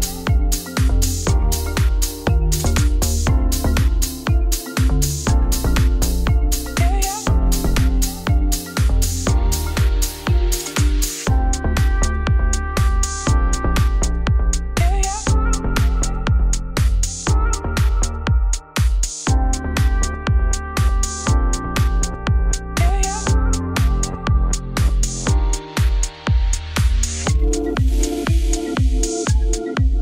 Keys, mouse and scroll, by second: 2.0 KP_1, 2.3 KP_9, 2.8 KP_1, 3.3-4.6 middle drag, 4.6 scroll down 1, 4.7 g, 5.9 middle click, 6.7 scroll down 1, 6.9-8.7 middle drag, 8.7 click, 9.2 shift+middle click, 9.5 scroll up 2, 9.6 Tab, 9.8 click, 10.8 Tab, 12.8 click, 13.7 KP_3, 15.4 scroll up 1, 15.6 middle click, 15.8 g, 17.7 middle click, 18.0 scroll down 2, 25.7 s, 26.5 middle click, 27.4 g, 29.5-30.0 middle drag.